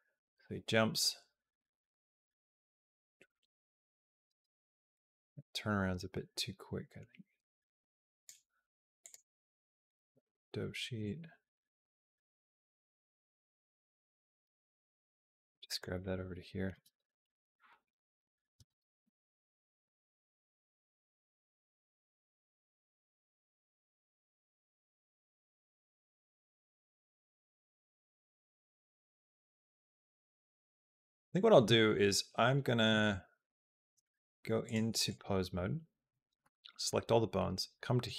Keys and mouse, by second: 4.1 space, 4.8-8.1 drag, 8.8 click, 10.8-14.2 drag, 14.6 click, 14.8 g, 15.8 click, 16.5 space, 18.4 space, 18.9 g, 19.5 click, 19.6 space, 20.9 space, 21.3 g, 22.0 click, 22.1 space, 24.1 space, 24.3 click, 24.7 space, 26.2 click, 26.5 space, 27.0 space, 28.4 space, 28.9-30.4 drag, 34.4 click, 36.2 a, 37.2 click.